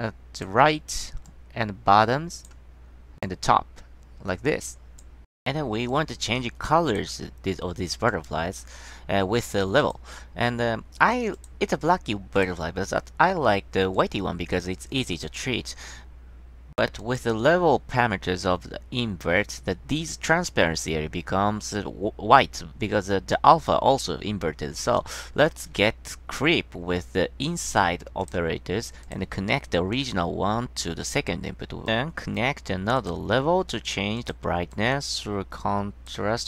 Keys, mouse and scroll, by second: 1.4-2.6 drag, 3.4-4.0 drag, 8.2 click, 9.9 click, 11.5 click, 12.5 click, 14.1-15.4 drag, 25.1 click, 28.3 click, 29.2 click, 30.1-30.9 drag, 33.1 click, 34.3 click, 34.9 click, 35.7-36.2 drag.